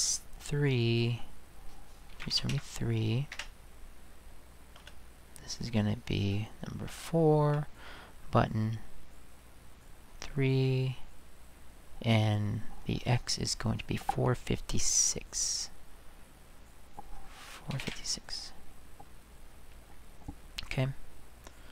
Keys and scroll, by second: 1.9-3.0 typing, 3.3 Return, 4.8 space, 6.9 4, 17.4-18.3 typing.